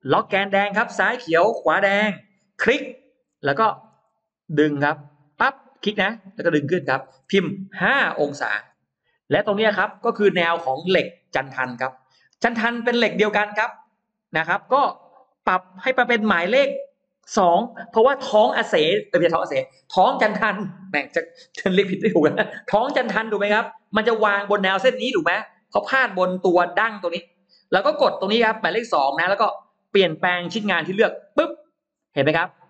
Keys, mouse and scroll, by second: 1.3 Left, 2.0 Right, 2.5 Right, 2.7 click, 3.1 middle click, 3.5 middle click, 4.4 middle click, 5.2 click, 7.8 5, 8.8 Return, 9.7 middle click, 9.7 space, 10.1-11.1 scroll up 2, 10.5 click, 10.9 middle click, 11.8 middle click, 12.4 scroll up 1, 13.6 click, 16.6 click, 25.0-25.4 scroll down 1, 25.6-25.9 scroll down 1, 26.0-27.2 scroll up 3, 31.2 click, 32.0-32.3 scroll down 2, 32.5 middle click.